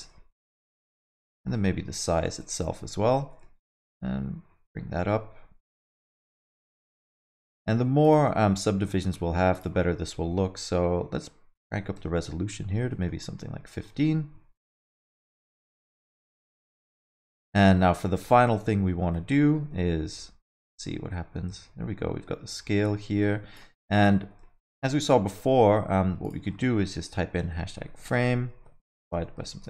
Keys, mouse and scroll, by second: 3.4 click, 3.6 shift+click, 6.6 scroll up 2, 6.8 alt+middle click, 7.0 middle click, 8.1 click, 8.5 alt+middle click, 8.9 scroll up 1, 9.5 click, 12.9 alt+middle click, 13.1 alt+scroll up 1, 13.2 middle click, 13.7 alt+middle click, 15.7 middle click, 16.0 space, 16.3 middle click, 16.7 alt+shift+z, 17.1 alt+middle click, 19.1 space, 19.3 alt+middle click, 20.5 shift+click, 24.7 shift+Left, 26.2 click.